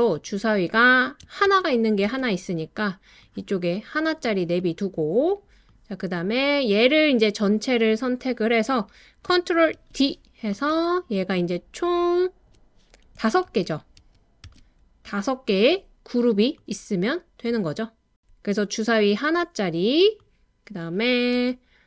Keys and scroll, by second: 1.4 super+c, 2.0 super+v, 9.7 super+d, 13.5 super+d, 14.0 super+d, 14.4 super+d, 21.3 BackSpace.